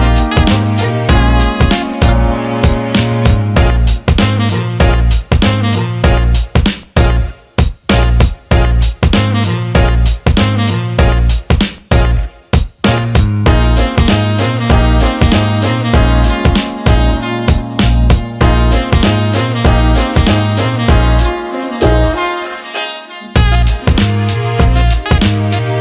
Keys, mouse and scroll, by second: 1.2 click, 4.0 click, 6.3-7.5 drag, 8.1 click, 8.9-10.4 drag, 10.9 alt+middle click, 11.6 alt+middle click, 12.5 alt+middle click, 12.8 alt+shift+middle drag, 14.1-15.6 drag, 16.2 middle click, 17.4-21.7 drag, 21.9 alt+shift+middle click, 23.0 Tab, 23.5 alt+shift+middle click, 23.8 alt+middle click, 24.8 middle click.